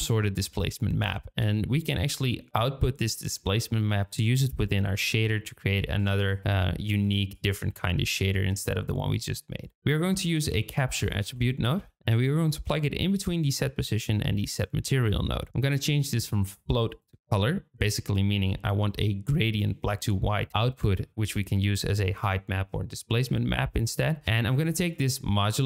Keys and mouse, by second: 5.3 shift+middle click, 6.3 drag, 6.9 g, 9.8 shift+a, 16.0-17.2 drag, 24.1 shift+click, 24.9-25.6 drag.